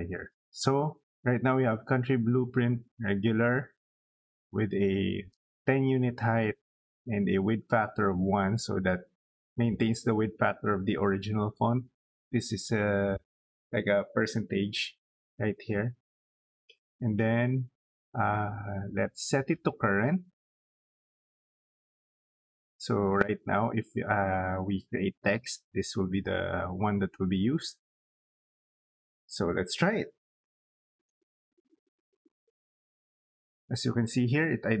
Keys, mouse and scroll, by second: 19.1 click, 21.2 click, 27.7 click, 28.6 middle click, 29.1 scroll down 2, 29.5 middle click, 30.5 t, 30.6 space.